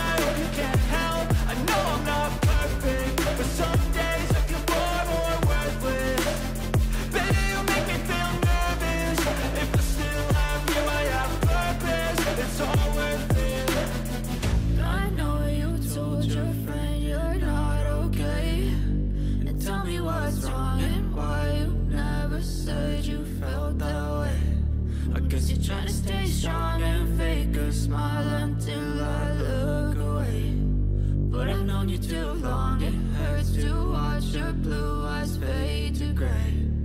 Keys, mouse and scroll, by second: 3.5 ctrl+a, 5.7 ctrl+d, 6.5 double click, 19.3-23.4 drag, 23.6-25.6 drag, 31.0 ctrl+j, 35.8 click.